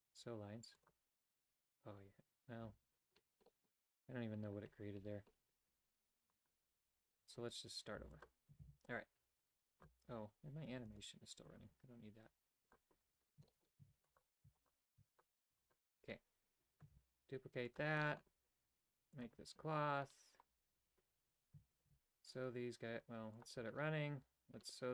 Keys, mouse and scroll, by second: 1.0 click, 3.5 middle click, 7.4 Tab, 8.0 x, 8.6 shift+a, 11.3 shift+space, 12.7 shift+a, 13.0 Tab, 13.5 shift+middle click, 13.8 w, 14.5 w, 15.0 w, 15.5 w, 16.9 shift+d, 18.0 middle click, 19.2 click, 20.8 alt+right click, 21.7-22.7 alt+shift+right drag, 23.4 click.